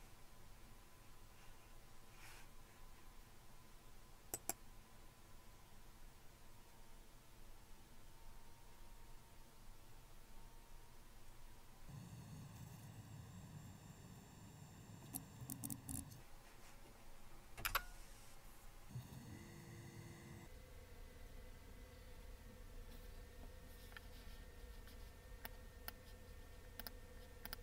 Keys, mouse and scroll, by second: 4.4 click, 15.1 Return, 15.5 Down, 15.6 Down, 15.7 Down, 15.9 Up, 17.6 Return, 25.5 click, 26.8 click.